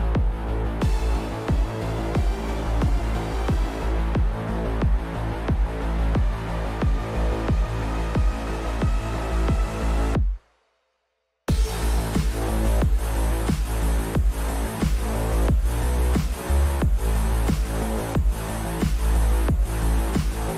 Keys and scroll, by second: 1.3-2.8 typing, 17.9 BackSpace, 19.0 shift+BackSpace, 19.8 Return.